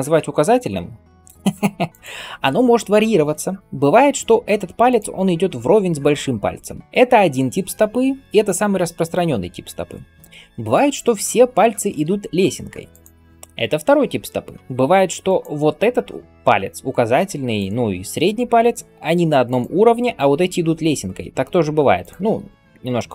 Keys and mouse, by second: 0.3 r, 1.9-14.5 middle drag, 3.6 g, 11.9 g, 14.6 g, 17.4 click, 18.2 g, 21.8 click, 22.3 g.